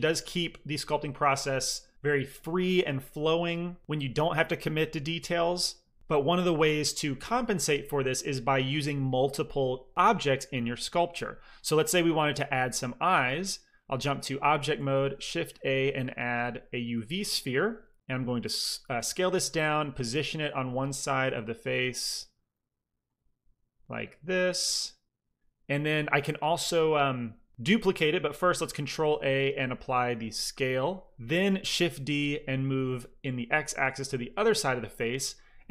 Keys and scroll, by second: 14.6 shift+a, 19.7 g, 21.1 typing, 22.2-23.7 typing, 28.5 ctrl+a, 31.7 shift+d, 32.1 x.